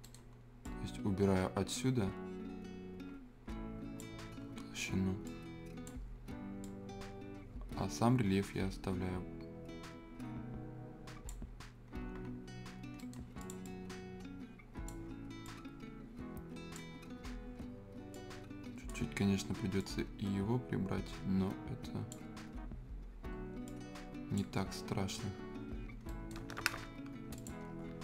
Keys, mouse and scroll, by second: 0.0 right click, 0.6-12.7 drag, 12.7 scroll down 1, 13.0 right click, 13.4-17.0 drag, 17.0-18.1 scroll up 1, 18.1 click, 19.2 scroll up 1, 19.8-24.6 drag, 24.6-25.6 scroll down 1, 25.6 scroll up 1, 26.1 right click, 26.4 scroll down 1, 26.6 Escape, 27.3 click, 27.6 scroll down 1, 27.8 scroll up 1.